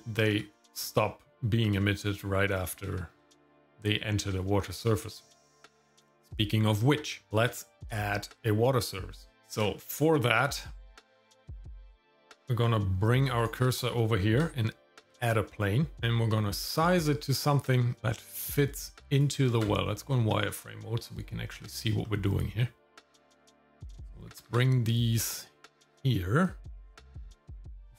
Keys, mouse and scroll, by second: 2.9 shift+middle click, 3.4-4.4 scroll up 2, 4.4-4.7 scroll down 1, 4.8 shift+middle click, 5.1 middle click, 7.3 shift+middle click, 7.8 middle click, 8.8 click, 9.3 scroll down 1, 10.2-11.5 scroll down 1, 13.4 shift+right click, 15.0 shift+a, 16.4 Tab, 17.5 click, 19.5 shift+z, 22.0 middle click, 23.1 click, 24.3 g, 26.4 click, 27.0 g.